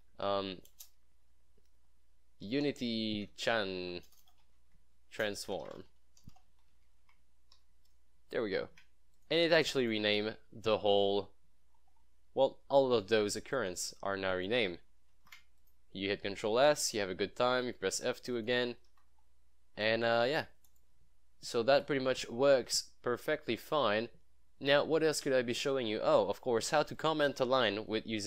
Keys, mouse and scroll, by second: 2.6-7.6 typing, 8.7 ctrl+s, 9.3 click, 10.1 scroll down 1, 11.8 scroll up 1, 13.6 click, 15.2 ctrl+s, 15.7 click, 17.7 F2, 18.4 click, 18.4 click, 19.1 F2, 19.2 scroll down 1, 19.7 scroll up 1, 20.8 click, 22.4-24.1 scroll down 1, 24.8 scroll up 1, 27.4 click, 28.0 scroll down 1.